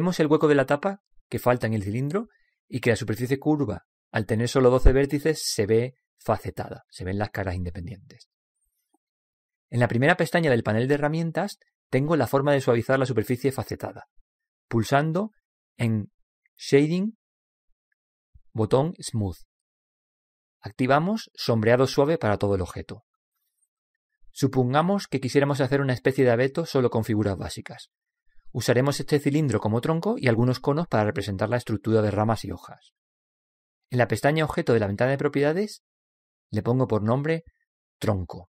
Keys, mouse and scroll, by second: 0.8 middle click, 1.0-1.4 scroll up 1, 1.4 middle click, 1.9 scroll up 1, 2.0-5.2 middle drag, 11.6-14.6 drag, 14.8 click, 19.5 click, 35.7-38.5 drag.